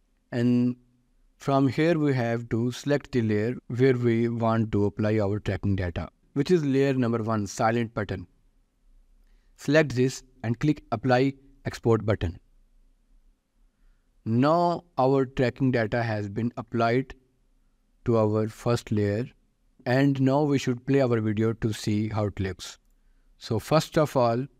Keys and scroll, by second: 19.7 ctrl+s.